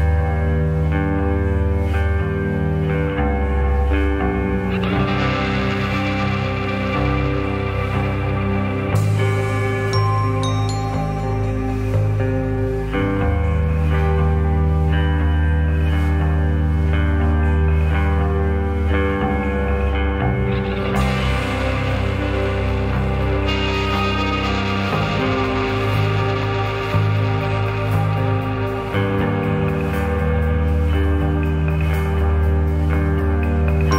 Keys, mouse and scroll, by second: 0.7 middle click, 1.3 click, 1.8 shift+click, 2.3 g, 4.2 click, 4.7 g, 6.8 click, 7.3 shift+click, 8.0 g, 9.3 click, 9.8 shift+click, 10.4 g, 11.5 click, 11.7-13.1 middle drag, 13.1-13.5 scroll up 2, 13.5 scroll down 1, 13.7-16.4 middle drag, 16.4 click, 16.9 click, 17.8 `, 18.9 click, 19.5 shift+click, 23.3 click, 23.6 shift+click, 24.7 g, 32.5 click, 33.3 shift+click.